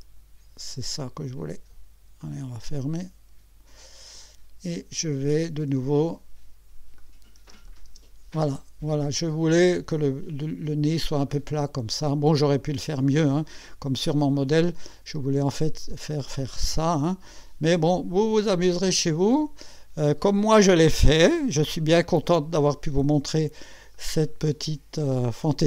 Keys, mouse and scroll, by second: 2.2 click, 7.0 click, 7.4 space, 7.7 click, 8.6 click, 10.7-11.0 scroll up 1, 11.3 click, 12.7 click, 14.4 click, 14.9-17.3 drag, 17.7 click, 18.6 click, 19.4 right click, 20.2-21.1 drag, 21.6 1, 22.1-22.7 scroll down 2, 22.7 scroll up 1, 23.9-25.3 drag, 25.4 right click.